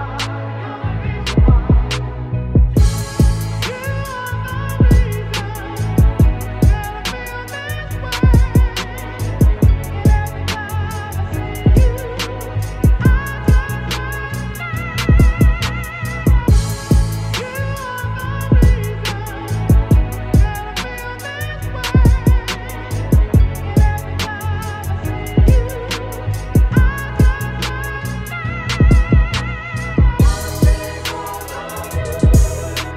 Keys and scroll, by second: 1.4 ctrl+c, 6.4 b, 6.9 ], 9.1 ctrl+t, 16.5 Return, 21.9 ctrl+t, 26.5 Return, 32.1 ctrl+t.